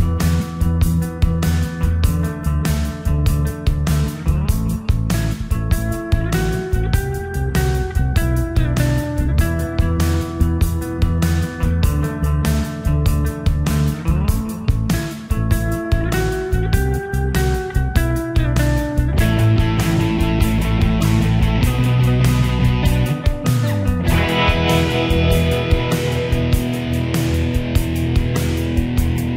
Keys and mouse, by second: 5.1 middle click, 10.2 middle click, 14.3 click, 27.4 middle click.